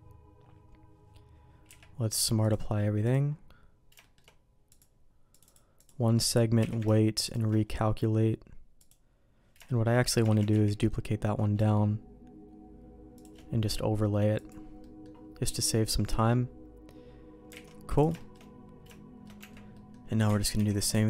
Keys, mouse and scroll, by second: 1.7 q, 4.0 shift+middle click, 4.7 click, 5.3 click, 5.8 click, 6.6 q, 8.8 click, 9.6 shift+middle click, 10.3 shift+d, 14.3 click, 14.8 middle click, 16.1 middle click, 17.6 alt+a, 17.9 click, 18.2 middle click, 18.8 shift+middle click, 19.4 Tab, 19.7 middle click, 20.3 alt+a, 20.5 c.